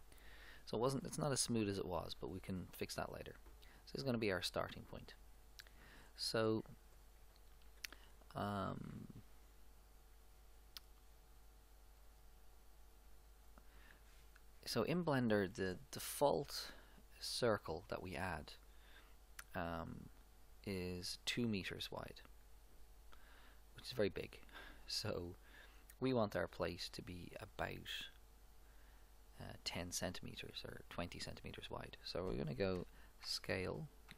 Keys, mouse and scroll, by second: 12.0-14.8 drag, 33.3 s.